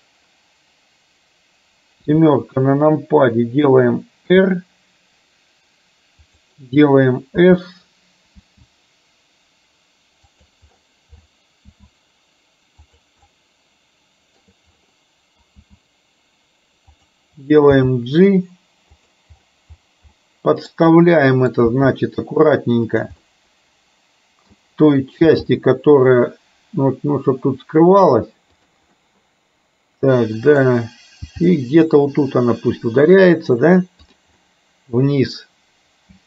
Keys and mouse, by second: 2.1 KP_7, 4.3 r, 7.5 s, 8.5 s, 11.7 s, 13.3-14.5 middle drag, 15.7 s, 18.0 g, 20.2 middle click, 21.2 middle click, 21.8 g, 23.3-24.6 middle drag, 25.5 g, 29.1-30.6 middle drag, 31.3 g, 34.5 middle click, 35.5-36.2 middle drag.